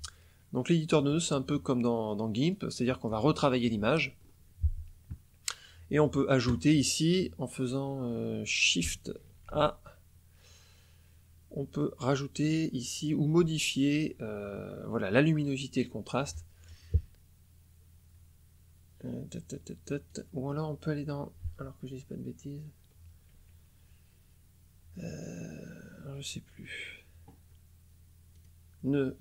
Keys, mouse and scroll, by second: 0.8 click, 2.4 click, 4.1-6.8 scroll up 1, 9.4 shift+a, 20.0 click, 28.3 click.